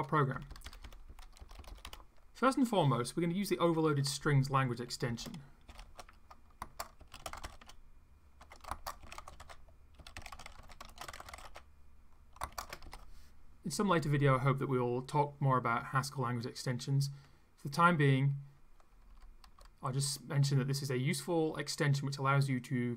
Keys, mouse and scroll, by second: 0.3 Up, 1.4 Return, 1.8 Up, 5.1-12.9 typing, 18.9 Left.